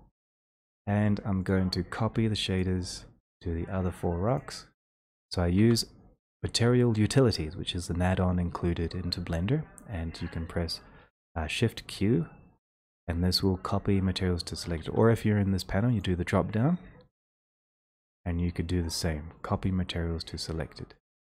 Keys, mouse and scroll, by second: 0.2 click, 1.6 click, 2.6 shift+click, 3.5 shift+click, 4.9 shift+click, 14.8 Escape, 16.0 click, 20.8 click.